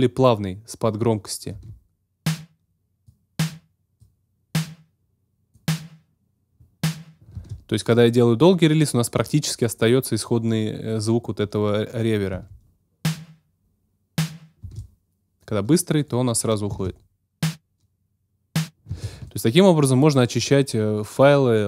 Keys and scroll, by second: 1.5 space, 7.3 space, 12.3 space, 14.6 space, 16.7 space, 18.9 space.